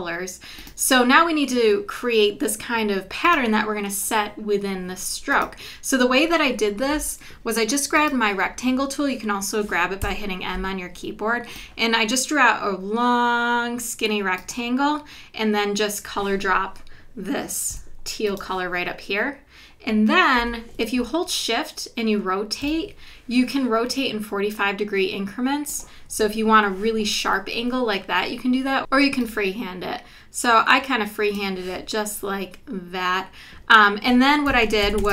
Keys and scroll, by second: 10.0 m, 17.7 i, 20.4 v, 34.6 super+-.